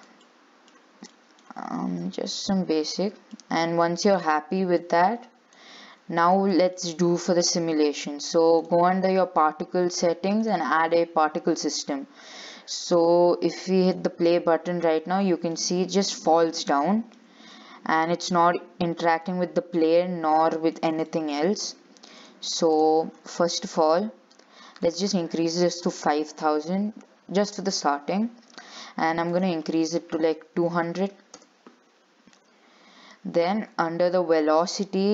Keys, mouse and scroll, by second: 0.4 middle click, 1.2 scroll down 2, 1.3 shift+middle click, 2.2 click, 3.4 scroll down 1, 3.6-5.0 middle drag, 5.0 click, 6.0-6.8 scroll down 9, 6.8-8.8 shift+middle drag, 8.8 click, 10.6 click, 11.6-12.0 scroll down 6, 13.1-15.0 drag, 15.0-15.4 scroll up 6, 15.4 shift+middle click, 16.3-16.9 scroll down 5, 16.9-20.2 shift+middle drag, 20.2 scroll down 3, 20.5-21.6 shift+middle drag, 21.6 scroll up 3, 22.4 click, 23.3 scroll up 4, 23.6-25.0 middle drag, 25.0-26.5 drag, 26.5 0, 29.5-30.9 drag, 30.9 0, 32.5-34.6 scroll down 17, 34.6-35.1 drag.